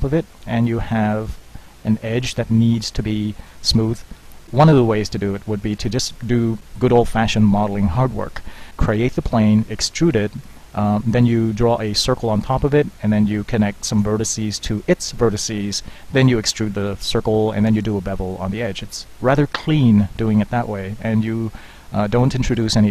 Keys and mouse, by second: 2.4-3.5 middle drag, 5.7 Tab, 6.6 Tab, 6.6 z.